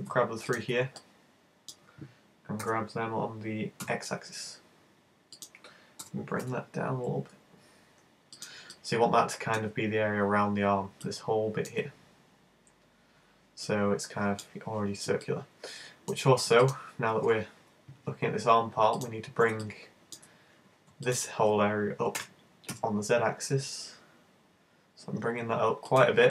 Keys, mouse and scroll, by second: 0.5 shift+right click, 1.0 middle click, 2.8 g, 5.5 click, 6.1 g, 8.5 click, 8.8 middle click, 11.1 middle click, 13.7 middle click, 15.3 middle click, 16.7 right click, 19.0 shift+right click, 19.6 middle click, 21.1 shift+right click, 22.2 shift+super+g, 26.0 click.